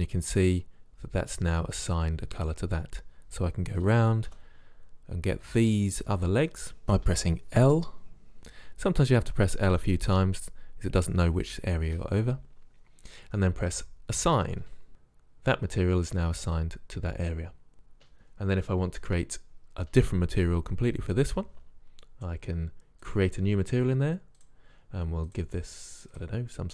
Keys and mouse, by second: 0.0 a, 4.5 l, 5.7-9.9 typing, 13.9 click, 14.9 a, 23.2-26.7 drag.